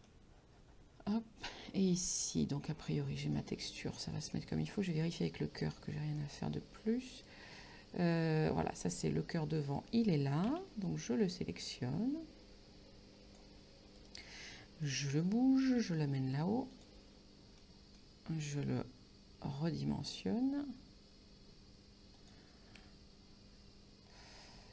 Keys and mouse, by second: 0.1 middle click, 4.4 middle click, 5.7 middle click, 7.2 right click, 9.7 right click, 10.5 c, 10.9 click, 14.0 right click, 14.9 middle click, 15.9 g, 16.8 click, 17.7 middle click, 19.5 s, 22.2 click, 22.9 g.